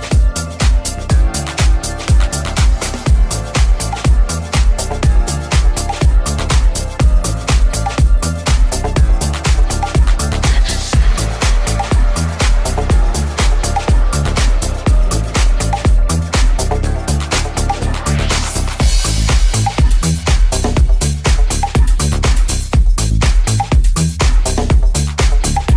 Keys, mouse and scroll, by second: 1.1 g, 9.0-25.7 middle drag, 23.2 k.